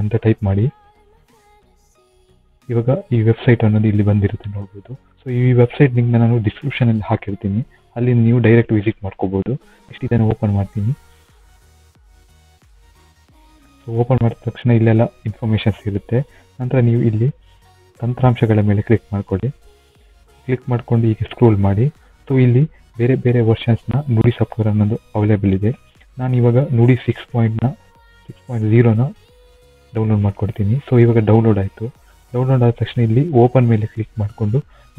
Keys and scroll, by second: 0.0-1.6 typing, 1.8 Return.